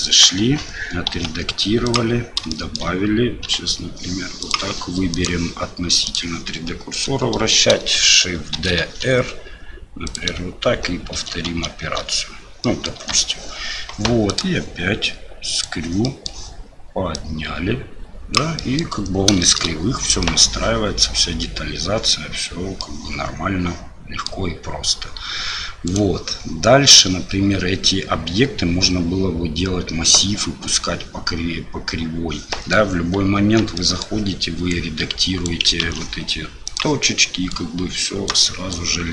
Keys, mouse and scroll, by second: 0.4 Tab, 1.1 s, 2.5 shift+click, 5.1-6.1 drag, 8.5 shift+d, 11.1 shift+r, 11.4 shift+r, 12.6 middle click, 12.9 Tab, 14.4-15.6 drag, 16.0 middle drag, 17.2-18.4 drag, 18.6 middle drag, 19.4 shift+middle drag, 20.2 middle drag, 22.8-24.3 middle drag, 25.8 click, 32.5 middle click, 33.4 Tab, 33.7 middle click, 34.7 click, 35.8 ctrl+z, 36.6 click, 37.5 click, 38.7 click.